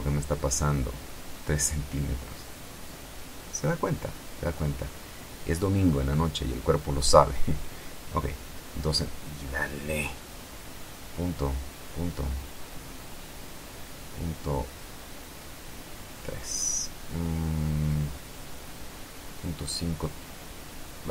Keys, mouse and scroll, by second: 0.1 End, 0.5 Return, 3.0-3.8 scroll down 2, 3.8-5.4 scroll up 1, 5.4 click, 6.5 Home, 7.0 Delete, 7.6 KP_2, 8.1 KP_Enter, 10.7 click, 11.9 BackSpace, 13.9 KP_Decimal, 14.9 Delete, 16.6 KP_5, 16.9 KP_Enter.